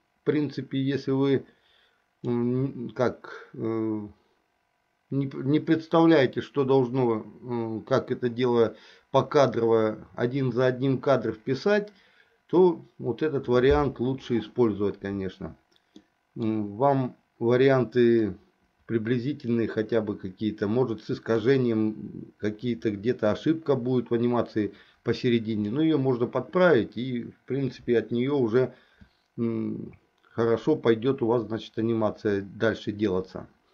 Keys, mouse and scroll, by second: 16.1 middle click, 18.4-21.6 drag, 25.7 click.